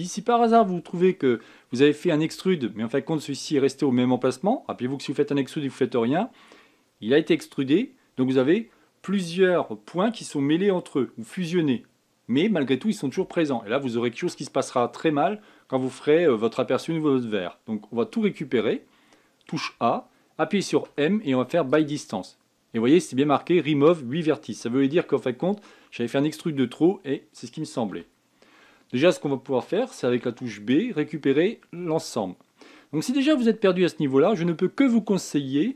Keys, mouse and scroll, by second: 18.7 a, 19.0 a, 21.1 m, 28.3 a, 30.5 b.